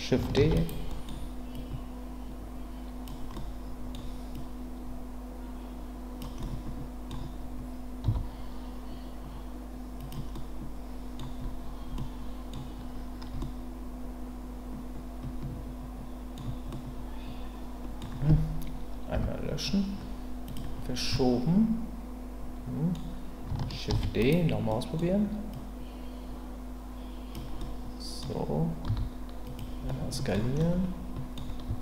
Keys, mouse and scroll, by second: 0.4 shift+d, 0.5-1.0 right drag, 1.0 middle click, 1.5-3.0 drag, 3.3-3.9 scroll up 1, 4.4-6.2 drag, 6.4 middle click, 8.0 s, 10.0 click, 10.3-11.2 middle drag, 11.9-12.5 middle drag, 12.5-13.4 scroll down 1, 13.4-16.4 middle drag, 16.7-18.0 middle drag, 19.1 Delete, 20.4 click, 21.1-22.9 middle drag, 23.9 shift+d, 24.2-24.8 right drag, 24.8 middle click, 25.5-27.3 drag, 27.6-28.2 middle drag, 28.8 s, 29.4 click, 29.9-30.3 middle drag, 30.3 scroll down 1, 30.6 middle click, 31.6 s.